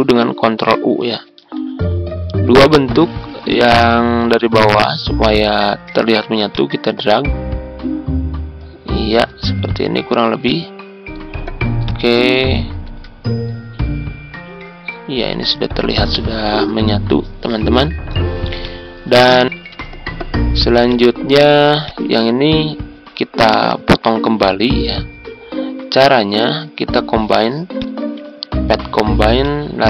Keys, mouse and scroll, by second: 0.7 ctrl+u, 2.6 click, 4.6 shift+click, 7.0-9.3 ctrl+drag, 10.4 click, 11.8 ctrl+click, 13.5-17.0 drag, 19.5 Tab, 20.8 click, 21.8 shift+click, 27.7-29.8 drag.